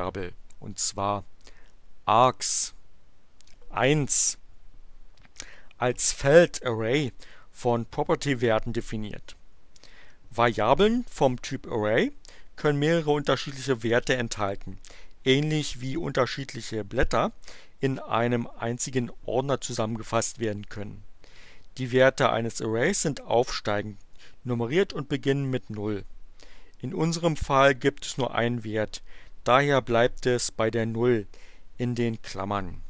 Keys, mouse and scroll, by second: 2.5-3.6 drag.